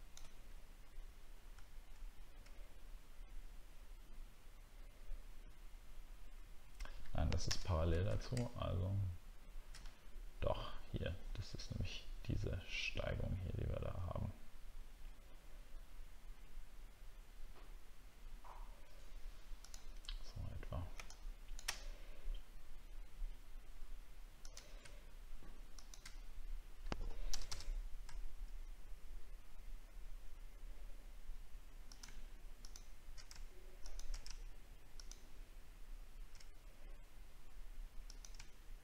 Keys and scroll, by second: 1.7-2.7 alt+scroll down 1.